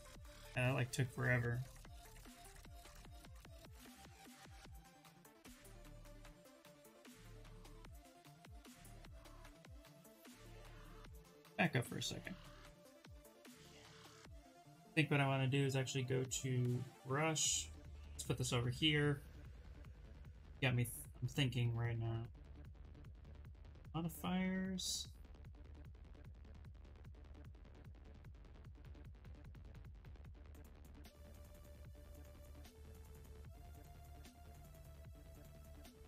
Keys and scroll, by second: 1.8 w, 4.0 w, 8.7 q, 10.5 ctrl+z, 10.7 ctrl+z, 10.9 ctrl+z, 11.3 ctrl+z, 11.6 ctrl+z, 11.8 ctrl+z, 12.0 ctrl+z, 12.1 ctrl+z, 12.3 ctrl+z, 12.6 ctrl+z, 12.8 ctrl+z, 13.1 ctrl+z, 13.4 ctrl+z, 13.7 ctrl+z, 32.7 z, 33.3 ], 34.7 [.